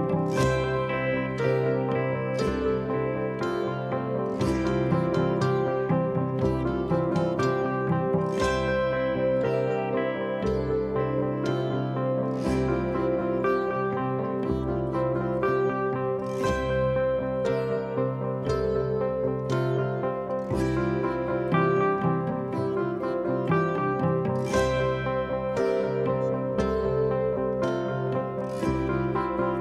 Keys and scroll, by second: 1.5 p, 3.7 p, 6.0 p, 7.7 p, 8.7 4, 15.0 3, 18.5 p, 20.1 p, 21.1 p, 21.9 p, 23.2 p, 24.2 p, 25.6 p, 28.5 p, 29.4 p.